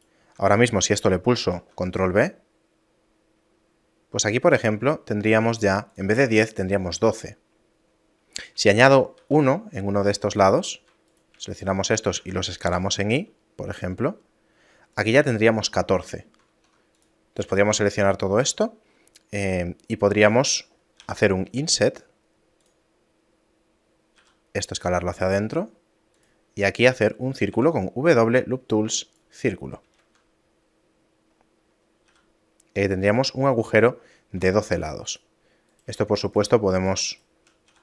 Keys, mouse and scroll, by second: 1.4 ctrl+b, 6.3 a, 9.2 ctrl+r, 11.1 alt+right click, 11.5 alt+shift+right click, 12.2 s, 15.3 a, 16.5 ctrl+Tab, 17.5 a, 24.2 s, 27.5 w, 29.9 shift+space, 30.7 middle click, 31.3 scroll down 1, 32.1 s, 34.7 ctrl+Tab, 35.7 right click, 36.3 shift+right click, 37.7 s.